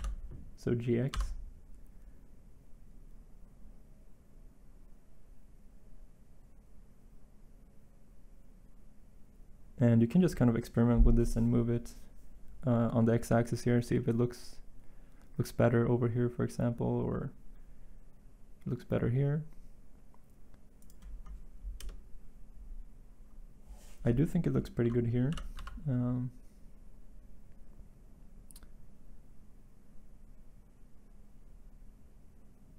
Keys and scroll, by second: 1.1 x, 21.7 Insert, 25.3 g.